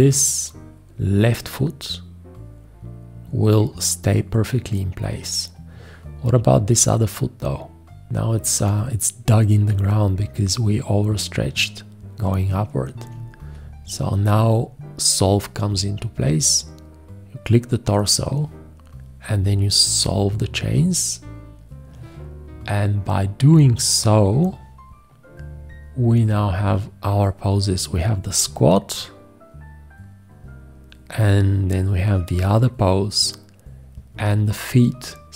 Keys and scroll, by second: 13.0 v.